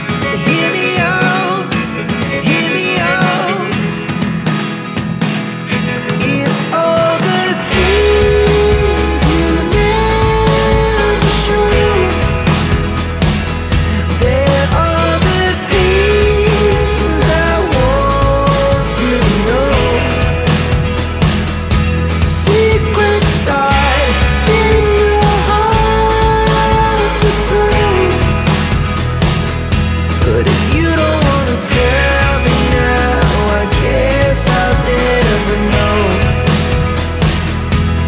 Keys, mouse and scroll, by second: 1.3 click, 1.5 double click, 3.0 click, 3.4 3, 4.0 click, 5.1 click, 6.5 ctrl+g, 8.0 click, 8.7 click, 9.3 click, 10.1 click, 11.3 click, 15.9 click, 17.3 click, 18.5-19.5 scroll down 1, 19.7 click, 21.0 click, 23.2 click, 27.5 right click, 28.9 click, 30.9 click, 32.6 click, 34.0 click.